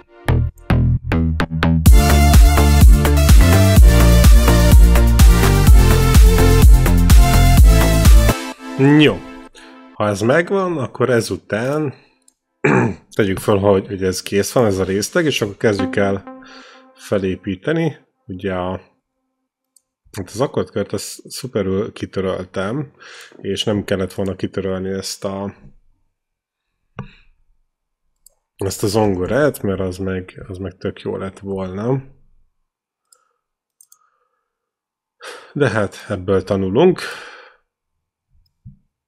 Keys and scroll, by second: 0.1 c, 0.9 e, 1.7 space, 8.1 space, 15.6 q, 20.3 ctrl+c, 29.0-30.5 typing, 31.8 BackSpace, 36.8 ctrl+v.